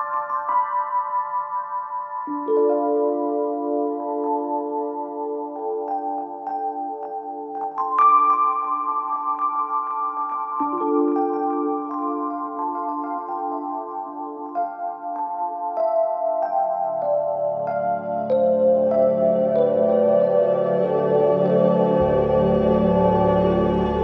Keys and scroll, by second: 3.0 1, 3.1 Return, 20.7 4, 23.1 s, 23.3 i, 23.3 n.